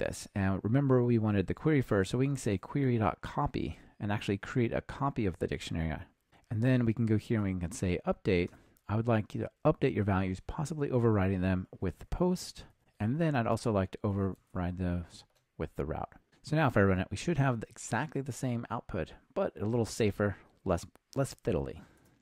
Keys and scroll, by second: 2.5 Return, 3.8 Return, 8.5 Return, 12.8 ctrl+alt+shift+Left, 15.3 Escape, 22.0 ctrl+r.